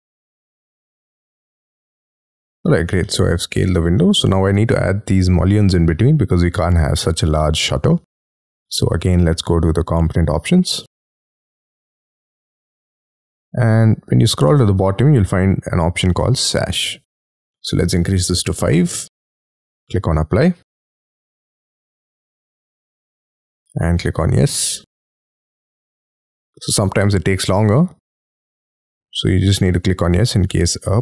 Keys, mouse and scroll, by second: 2.8 y, 3.0 middle click, 3.9 space, 8.1 right click, 18.6 5.